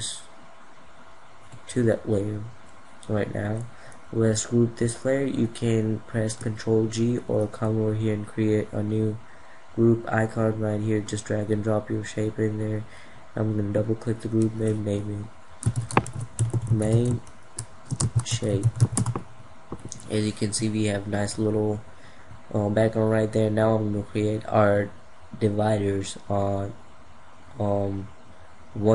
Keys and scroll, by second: 6.4 ctrl+g.